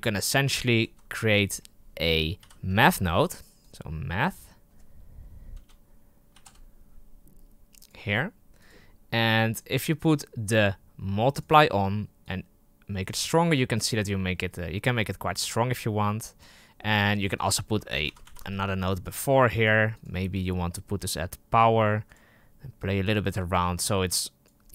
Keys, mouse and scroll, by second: 0.7 shift+a, 9.4-17.4 drag, 17.9 ctrl+c, 18.2 ctrl+v, 18.4-19.6 drag, 19.8-24.7 drag.